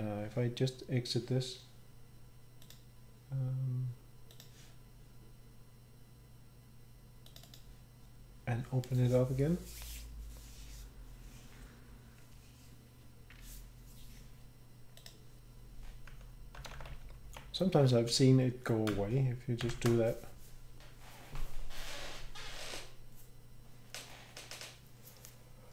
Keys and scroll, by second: 16.7 Page_Up, 16.8 Page_Up, 16.9 Page_Up, 17.1 Page_Up, 17.2 Page_Up, 19.6 ctrl+shift+b.